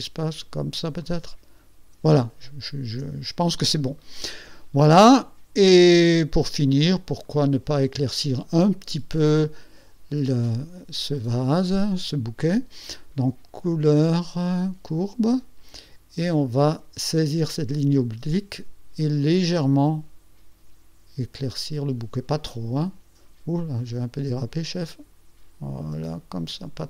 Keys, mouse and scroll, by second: 1.1 click, 2.4 ctrl+scroll up 2, 7.4 click, 13.8 click, 15.0 click, 17.7-22.6 drag, 24.0-25.4 drag.